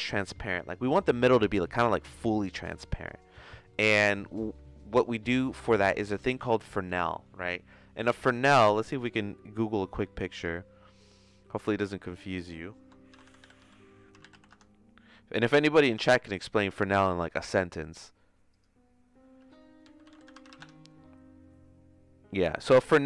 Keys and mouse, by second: 3.6 middle click, 4.4 middle click, 5.1 middle click, 5.9 shift+a.